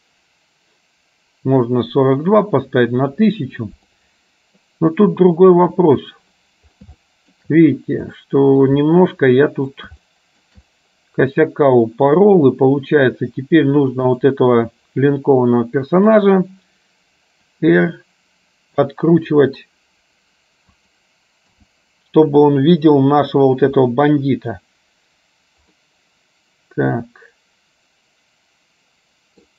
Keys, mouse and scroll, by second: 4.0 middle click, 7.1 shift+middle click, 8.2 middle click, 9.5 middle click, 10.2 shift+middle click, 14.1 click, 15.2-16.2 middle drag, 17.9 r, 21.6 KP_0, 25.9-29.5 middle drag.